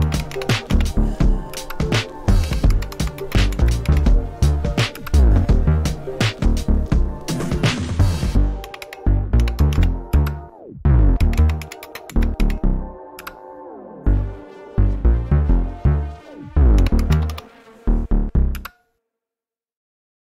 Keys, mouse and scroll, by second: 0.0-5.0 typing, 4.9 Return, 8.4-13.1 typing, 16.5-18.5 typing.